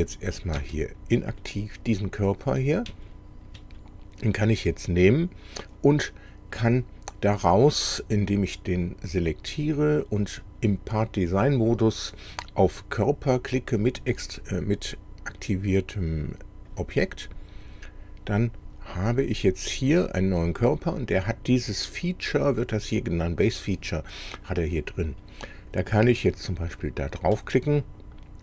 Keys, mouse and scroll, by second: 0.4 click, 0.6 space, 1.4-3.0 middle drag, 3.1 shift+middle click, 3.8-6.8 shift+middle drag, 8.8 click, 10.5 click, 11.5 click, 16.8 click, 19.4 click, 24.3 middle click, 25.2 middle click, 26.5 click.